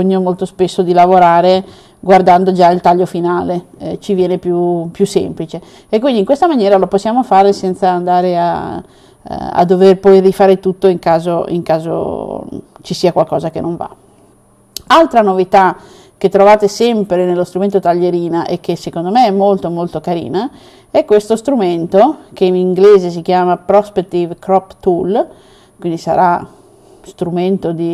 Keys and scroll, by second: 1.2 +, 2.0 +.